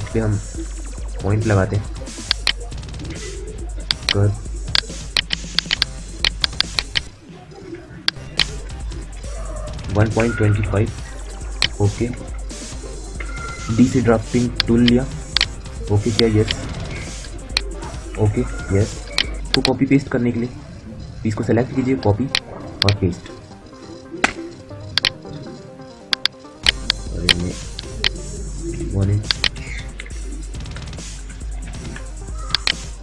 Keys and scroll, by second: 8.4-10.8 typing, 12.9 d, 17.9 Return, 19.2 F9, 24.0 space.